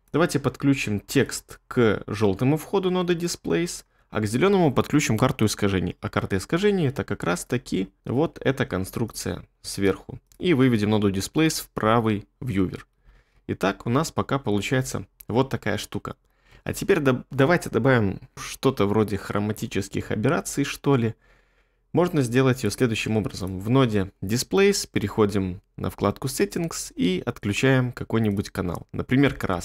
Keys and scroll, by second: 11.7 2, 13.1 space, 16.5 space.